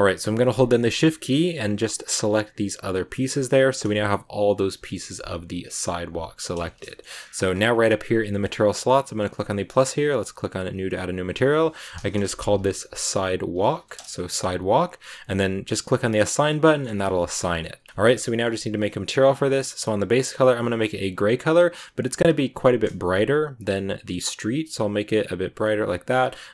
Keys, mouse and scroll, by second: 1.2 shift+right click, 2.1 shift+right click, 3.1 scroll down 1, 3.4-7.1 middle drag, 7.1-7.5 scroll up 10, 9.1-11.1 drag, 11.2-14.4 drag, 14.6-15.1 scroll down 2, 16.1 click, 16.5 scroll down 1, 16.6 middle click, 16.7 scroll up 1, 16.8 Tab, 16.9 scroll down 2, 17.1 shift+middle click, 18.0 scroll down 1, 18.2 scroll up 1, 18.2-19.7 middle drag, 19.7 click, 26.0-26.4 scroll down 5.